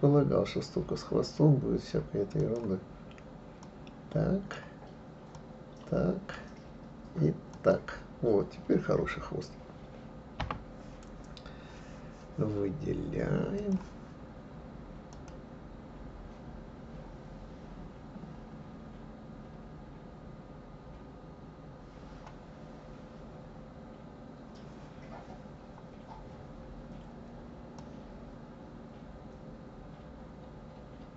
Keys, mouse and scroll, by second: 13.6-15.3 drag, 27.8-30.8 drag.